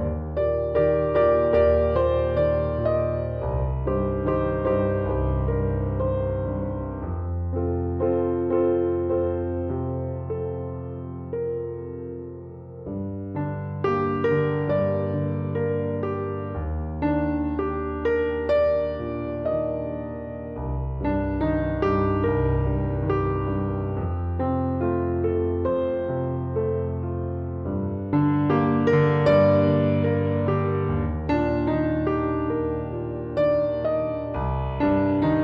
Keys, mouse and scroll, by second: 0.3-2.5 middle drag, 2.5 click, 2.5 right click, 5.1 click, 5.1 right click, 9.8-11.5 right drag, 11.6-13.1 right drag, 15.3-19.7 right drag, 19.8-21.8 right drag, 28.7-35.4 middle drag.